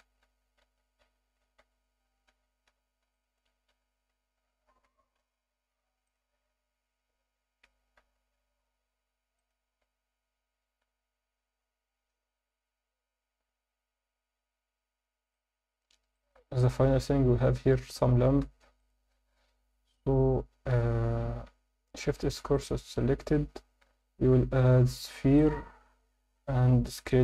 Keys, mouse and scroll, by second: 0.0 ctrl+z, 0.6 ctrl+z, 1.6 z, 2.7 b, 3.7 z, 4.0 scroll up 1, 4.8 g, 5.2 z, 6.0 click, 6.2 Tab, 7.6 g, 8.0 z, 9.4 click, 9.7 alt+a, 9.8 scroll down 1, 10.6-11.1 scroll down 1, 15.3-15.7 alt+shift+middle drag, 16.1 ctrl+alt+middle click, 16.5 click, 16.9 Tab, 18.5 3, 18.7 click, 21.0 Tab, 21.5 Tab, 21.9 shift+s, 23.4 Tab, 23.8 shift+a.